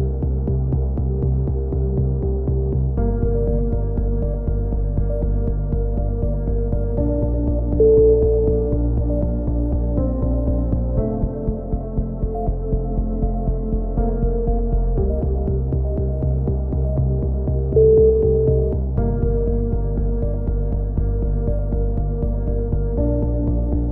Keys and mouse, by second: 0.1-0.8 right drag, 0.1 z, 0.8-1.2 middle drag, 1.2-1.5 drag, 1.5 KP_1, 2.2-2.6 middle drag, 2.6-4.3 drag, 4.3 middle drag, 4.3 KP_1, 4.6-5.0 right drag, 6.5-7.1 middle drag, 6.5 z, 7.1 drag, 7.3 middle click, 7.5 click, 7.5 z, 8.2 right click, 8.2 KP_1, 8.5 middle click, 8.8-9.3 right drag, 9.3 middle click, 9.3 c, 10.2 click, 10.2-10.6 right drag, 10.6 ctrl+z, 10.6 click, 10.9-12.3 drag, 13.5 click, 13.5 z, 13.9 click, 14.3 z, 14.4 click, 15.3-17.1 drag, 17.1 a, 17.3 z, 17.8 Tab, 18.0-18.6 drag, 22.3-23.3 drag, 23.5-23.9 drag.